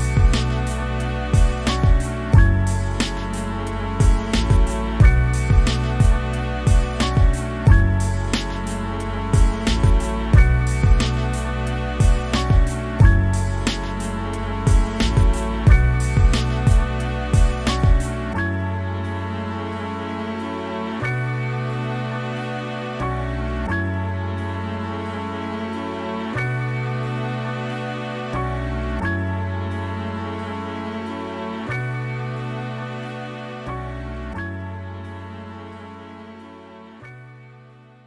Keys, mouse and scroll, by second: 0.0 click, 0.5 shift+middle click, 0.6 scroll up 1, 0.7 click, 1.4 scroll down 1, 1.5 click, 1.8 middle click, 1.9 click, 2.2 middle click, 2.4 click, 2.8 middle click, 3.0 click, 3.2 shift+middle click, 3.3 scroll up 1, 3.6 f, 3.8 click, 3.9 middle click, 4.1 click, 4.6 middle click, 4.8 click, 5.1 shift+middle click, 5.3 click, 5.6 middle click, 5.7 click, 5.9 shift+middle click, 6.1 click, 6.3 scroll down 3, 6.4 middle click, 6.6 scroll up 1, 6.7 click, 6.9 shift+middle click, 7.4 scroll up 1, 7.5 click, 7.7 shift+middle click, 8.1 click, 8.5 shift+middle click, 8.6 click, 9.2 scroll down 1, 9.4 shift+middle click, 9.6 click, 9.9 shift+middle click, 10.3 click, 10.7 scroll down 1, 10.8 shift+middle click, 11.0 click, 11.4 middle click, 11.6 click, 11.9 middle click, 12.1 click, 12.4 middle click, 12.5 scroll down 1, 12.6 click, 12.9 shift+middle click, 13.3 scroll up 1, 13.4 click, 13.6 scroll down 1, 13.7 middle click, 14.3-14.9 scroll up 2, 14.4 click, 14.9 f, 15.1 middle click, 15.2 click, 15.4 scroll down 2, 15.5 middle click, 15.9 middle click, 16.3 middle click, 16.4 scroll up 2, 16.6-18.0 middle drag, 18.0 scroll up 1, 18.2-20.1 shift+middle drag, 20.6 scroll down 3, 20.7 middle click, 21.6 click, 21.7 shift+middle click, 21.8-22.1 scroll up 1, 22.2-23.0 shift+middle drag, 23.0 Tab, 23.2 2, 23.9 click, 24.4 shift+middle click, 24.5 scroll up 1, 24.7 middle click, 25.5 scroll up 1, 25.8-26.4 middle drag, 26.4 r, 26.8 r, 27.0 click, 27.3-28.4 middle drag, 28.4 click, 29.3 r, 29.8 middle click, 30.3 scroll down 1, 30.4 middle click, 30.7 scroll up 1, 31.0-31.4 middle drag, 31.7-32.1 middle drag, 32.1 click, 32.7 r, 33.3 click, 33.6 scroll down 1, 33.8 middle click, 33.9 scroll up 2, 34.4 KP_Decimal, 34.8 scroll down 1, 35.2-36.4 middle drag, 36.4 right click, 36.7 middle click, 37.0 click, 37.4 middle click.